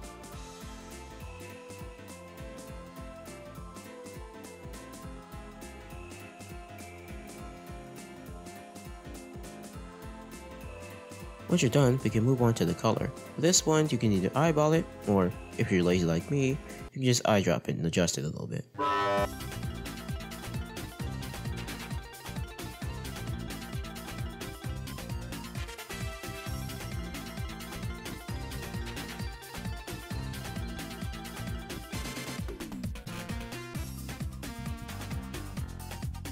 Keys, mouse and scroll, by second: 6.6-7.7 middle drag, 10.1 click, 11.5-12.1 scroll up 5, 12.2 middle click, 13.9 click, 19.0 click, 19.7-20.4 scroll down 7, 19.9 middle click, 20.3 middle click, 20.7 scroll up 2, 20.8 middle click, 21.2 scroll down 1, 22.0-23.0 scroll up 7, 22.2 middle click, 23.0 shift+middle click, 23.7 click, 28.8-30.3 drag, 30.4-31.2 scroll down 3, 31.2-31.8 scroll up 3, 32.6 click.